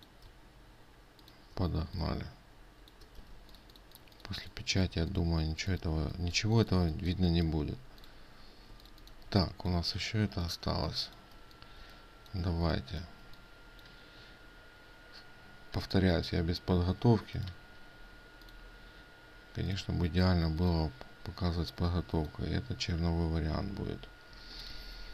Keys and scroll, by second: 3.8 ctrl+space.